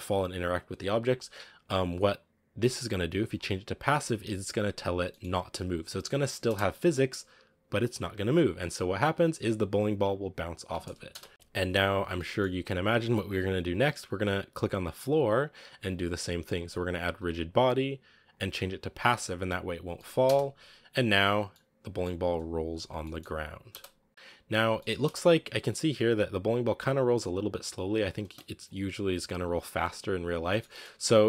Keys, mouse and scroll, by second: 0.8 right click, 4.1 click, 5.0-6.3 middle drag, 6.3 space, 8.8-11.0 drag, 11.0 space, 11.3 click, 12.1-14.9 middle drag, 14.9 right click, 17.1-19.8 drag, 19.8 middle click, 20.1 space, 21.4-23.6 middle drag, 23.6 space, 23.9 click, 24.5 scroll down 2, 24.7 middle drag, 24.9 space, 28.5-30.0 drag, 30.0 right click, 30.3 scroll up 1, 30.3-31.2 middle drag.